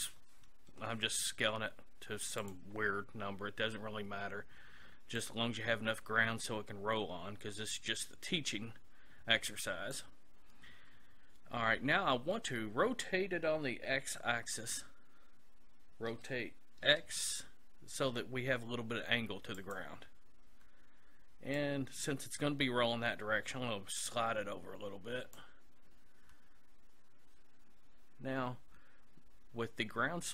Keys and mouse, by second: 5.2-6.9 drag, 16.1 r, 19.8-21.5 drag, 21.6-23.4 drag.